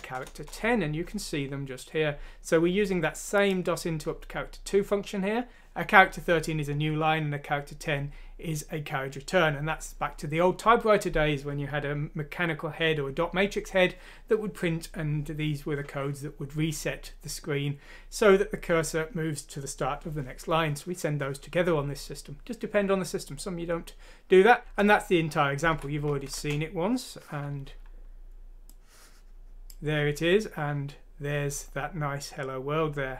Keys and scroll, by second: 0.2 Return, 25.7 F6, 26.3 Return.